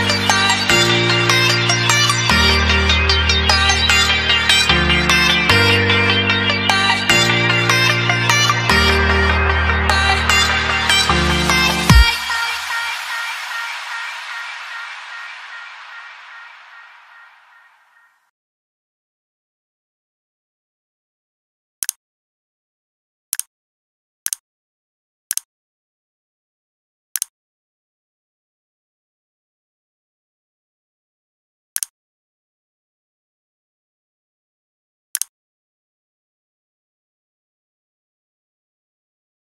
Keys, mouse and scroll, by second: 3.3 s, 5.3 click.